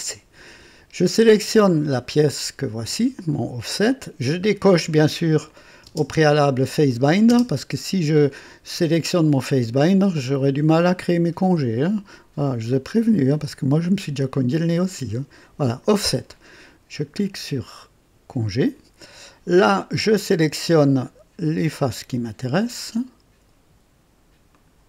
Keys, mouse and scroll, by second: 1.6 click, 3.8 click, 4.4 scroll down 2, 5.4 click, 5.9 space, 7.2 space, 7.4 space, 14.4 click, 18.2 click, 19.5 scroll up 2, 20.1 click, 20.8 scroll up 2, 21.9 click, 22.6 right click, 24.5 ctrl+click.